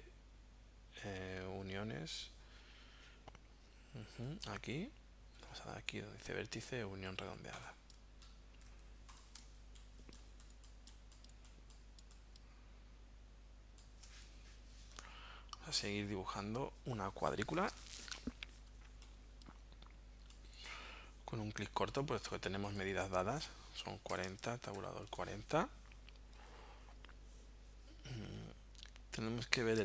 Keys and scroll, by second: 9.4 space, 23.6-25.3 typing.